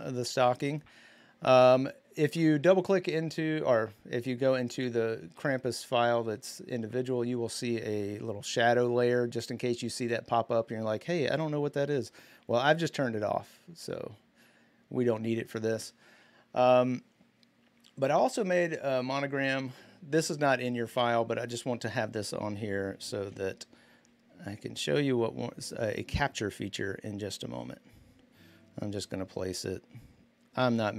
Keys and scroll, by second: 22.9 ctrl+t.